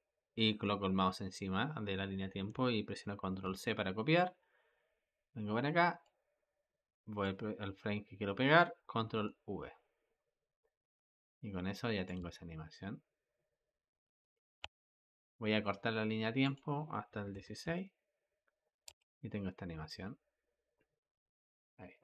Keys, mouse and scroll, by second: 3.3 ctrl+c, 5.9-8.9 drag, 8.9 ctrl+v, 10.8-12.1 drag, 12.1 space, 14.5 space, 16.3-18.7 drag, 18.7 space.